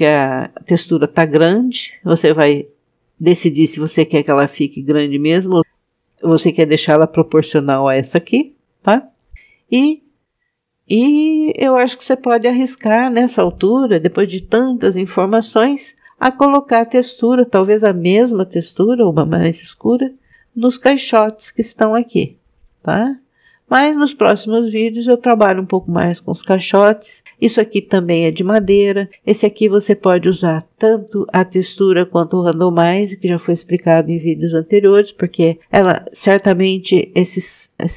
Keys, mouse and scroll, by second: 10.2-11.2 scroll down 2, 11.3-13.7 scroll up 1, 16.2 click, 27.7 click.